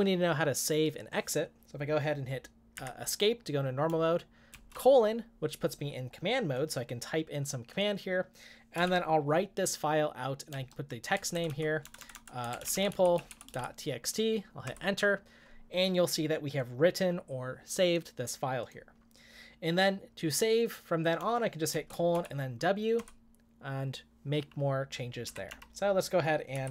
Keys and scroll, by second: 2.8 Escape, 4.5 typing, 8.8 typing, 10.5-14.0 typing, 14.6 Return, 21.9-22.6 typing, 23.0 Return, 25.2 Up, 25.5 End, 26.5-26.7 typing.